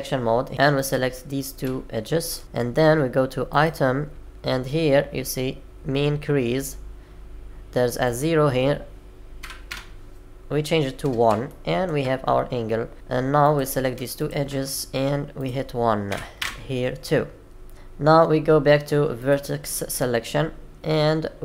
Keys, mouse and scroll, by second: 9.1 click, 11.4 shift+middle click, 19.1 click.